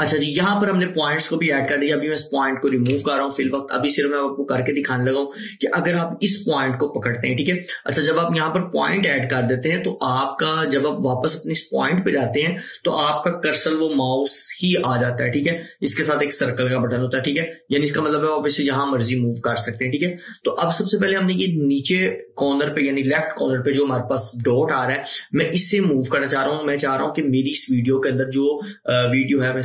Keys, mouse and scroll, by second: 2.9 ctrl+click, 2.9 typing, 3.2 ctrl+click, 8.9 click, 18.0-19.5 drag, 18.0 typing, 29.2-29.6 drag.